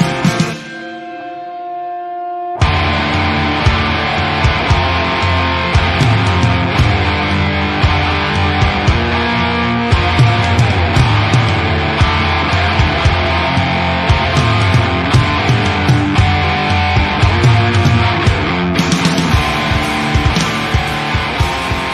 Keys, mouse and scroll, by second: 0.3 drag, 5.1 middle click, 5.5 scroll up 2, 5.7-6.2 shift+middle drag, 6.2 scroll up 1, 6.3 Tab, 6.5 alt+a, 7.1 click, 7.7 l, 8.6 click, 9.2 click, 10.0 alt+a, 11.1 click, 11.3 middle click, 11.7 alt+a, 12.0 l, 12.4-13.5 middle drag, 14.0-14.4 drag, 14.4 middle click, 14.7 alt+a, 15.1 l, 15.3-15.9 middle drag, 15.9 l, 16.3-17.3 middle drag, 17.3 drag, 17.6 click, 17.9 alt+a, 18.1 middle click, 18.8 l, 19.3 alt+a, 19.8 click, 20.2 click, 20.7 u.